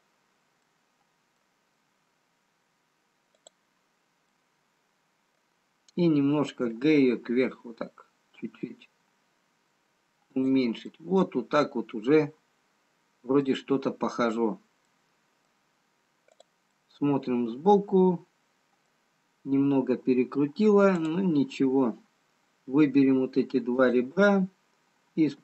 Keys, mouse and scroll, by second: 0.9 middle click, 2.4-2.9 scroll down 2, 3.8 click, 5.0 middle click, 7.6 g, 11.0 middle click, 15.0 middle click, 16.9 middle click, 16.9 click, 21.2 click, 24.1 shift+click.